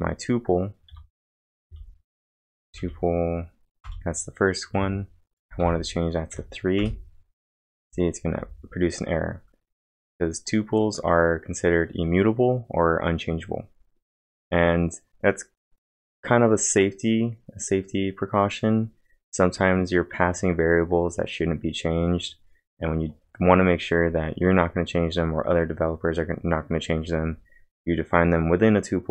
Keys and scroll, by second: 0.9-3.3 typing, 3.8 Return, 4.8 Up, 5.4-7.4 typing.